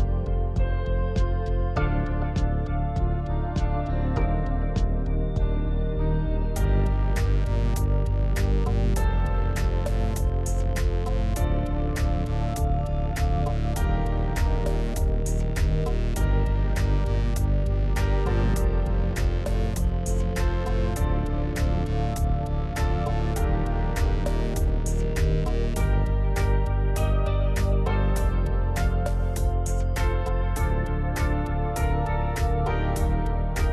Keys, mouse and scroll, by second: 0.8-2.4 middle drag, 5.0-7.1 drag, 7.9-9.3 middle drag, 9.3-10.9 drag, 12.1-13.3 drag, 13.9 click, 15.2-16.5 middle drag, 16.5 KP_7, 17.2-17.8 scroll up 1, 17.8 shift+middle click, 18.6 click, 19.7 alt+x, 20.3 alt+x, 20.6 alt+z, 21.6 click, 22.4 g, 26.7 g, 29.5-30.0 scroll down 2, 30.0-31.4 middle drag, 31.4 KP_1, 32.6 s.